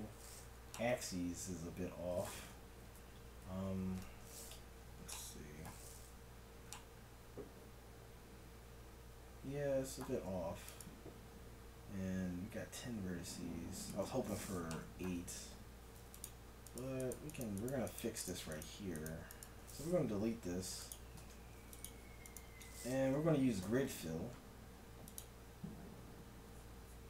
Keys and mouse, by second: 1.2 right click, 3.9 KP_Divide, 4.8 z, 10.7-12.5 drag, 12.8-14.8 middle drag, 15.3 ctrl+Tab, 20.1 x, 21.3 ctrl+Tab, 22.3-23.9 right drag, 23.7 ctrl+f.